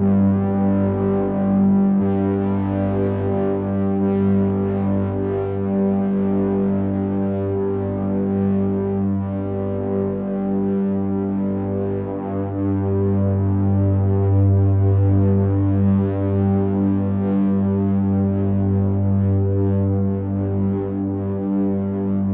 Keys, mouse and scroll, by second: 2.4 click, 4.3 ctrl+a, 8.4 click, 9.3 shift+click, 10.3 ctrl+a, 15.3 ctrl+z, 17.2 click, 19.5 click, 20.6 click, 22.1 ctrl+a.